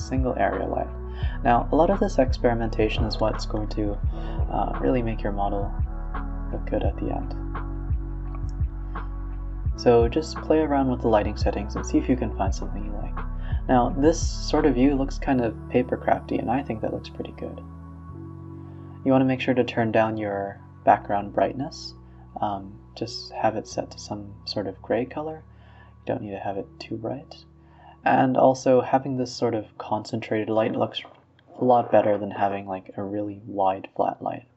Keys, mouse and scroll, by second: 0.0-0.3 middle drag, 0.3 g, 0.9 r, 1.7 g, 2.2 s, 2.9-4.1 drag, 4.1-6.0 typing, 7.9-9.6 drag, 10.3 a, 10.5 a, 10.6-11.2 scroll up 2, 15.3-15.8 drag, 16.0 click, 18.0 a, 18.1 a, 18.1-18.5 scroll down 2, 19.3 click, 20.0 shift+d, 20.5 x, 21.0 click, 21.6 scroll down 2, 21.8 click, 21.9 g, 23.3 s, 26.1-27.8 drag, 28.3-30.9 typing, 31.2-31.6 scroll up 2, 32.1 click, 32.4 Tab, 32.7 click, 32.9-33.6 scroll down 2, 33.6 e.